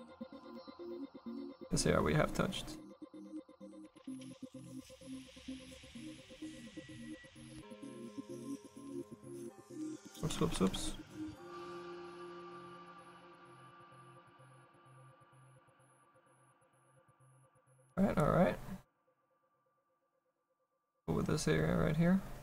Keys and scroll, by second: 9.7 ctrl+z.